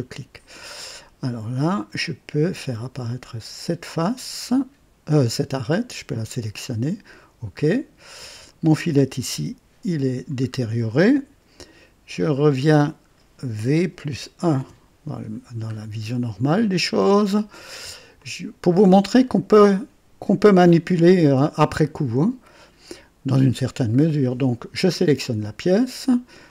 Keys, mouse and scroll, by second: 4.2 click, 6.2 click, 8.1 click, 9.3 Delete, 10.6-11.1 scroll down 1, 14.4 v, 14.5 KP_1, 15.8-16.1 scroll down 1, 16.4 click, 17.3 right click, 18.1-18.9 drag, 19.1 click, 21.5 click, 26.4 click.